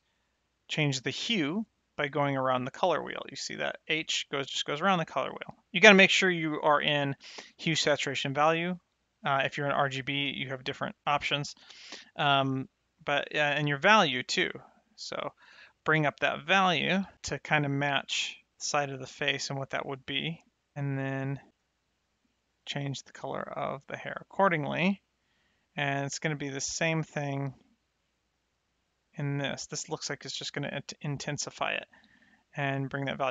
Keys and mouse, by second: 6.2 click, 6.2 right click, 9.5 click, 11.1 click, 13.1 click, 20.7 click, 22.0 middle click, 24.1 middle click, 25.4 click, 31.7 click.